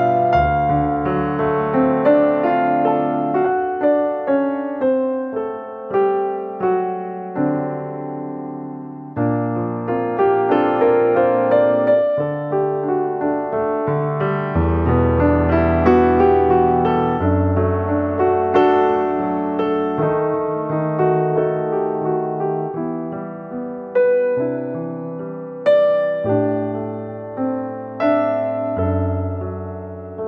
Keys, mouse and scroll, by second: 1.4-2.0 scroll down 6, 1.9 middle click, 2.2 Tab, 2.5 scroll down 1, 2.7 Tab, 2.9-3.5 scroll up 13, 3.5 middle click, 4.0-4.6 scroll down 1, 5.1 scroll down 5, 5.3 middle click, 6.0-6.8 scroll up 3, 6.3 shift+middle click, 7.2 Tab, 7.4 click, 7.8 middle click, 8.7 click, 11.3 middle click, 12.5 click, 13.0 ctrl+z, 13.5 shift+click, 14.0 middle click, 14.3 ctrl+z, 15.0 shift+click, 15.4 ctrl+z, 15.7 middle click, 17.4 middle click, 18.4 click, 18.7-19.2 scroll down 1, 19.2-19.5 scroll down 3, 19.2 e, 20.4 r, 21.0 g, 22.5 s, 23.3 g, 24.4 g, 25.7 e, 26.7 r, 27.5 g, 28.4 g, 29.6 s.